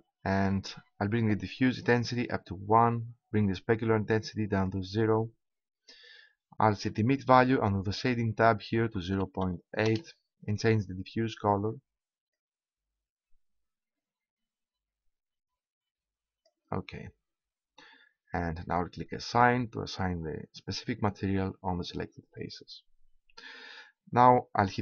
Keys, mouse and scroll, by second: 0.3-1.9 middle drag, 1.9-5.8 drag, 5.8-7.8 middle drag, 7.8-9.7 drag, 11.4-13.8 drag, 19.2 middle click, 19.3-20.9 drag.